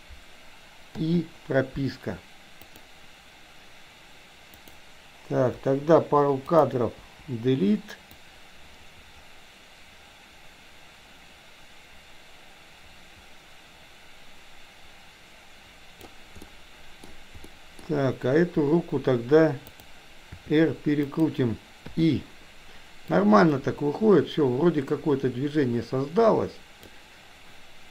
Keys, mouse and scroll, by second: 0.9 i, 2.7 click, 4.6 click, 5.6 Delete, 6.4 click, 6.9 Delete, 8.2-16.1 drag, 16.4-17.1 middle drag, 17.4 middle click, 19.8 drag, 20.3 r, 21.8 i, 23.1-26.9 drag.